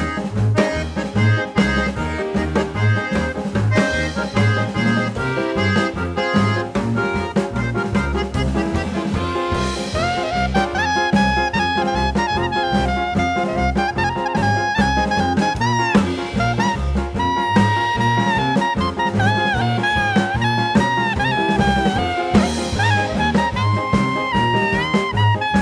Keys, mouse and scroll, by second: 0.1 click, 1.6 right click, 2.7 Tab, 3.3 click, 5.6 click, 7.8 click, 9.2 right click, 9.7 click, 10.4 right click, 10.9 right click, 13.0 right click, 13.9 click, 15.5 click, 18.7 click, 19.3 click, 22.2 click, 22.7 click, 23.5 click, 24.8 click, 25.5 click.